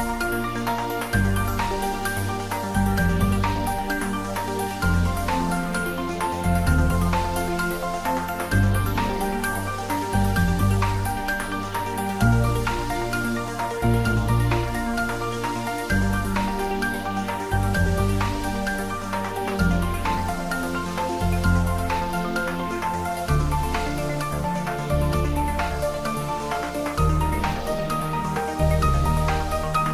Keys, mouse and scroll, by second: 0.4 click, 1.3 ctrl+z, 4.2 ctrl+z, 5.2 ctrl+z, 7.1 2, 7.3 click, 8.3-9.5 typing, 11.0 z, 16.4 click, 18.0 ctrl+r, 19.6 click, 22.7 g, 23.0 y, 25.1 click, 25.5-27.1 middle drag, 27.1-27.4 scroll down 1, 27.4 middle click, 28.0-29.0 scroll up 1, 29.0-29.6 scroll up 1, 29.6 ctrl+b.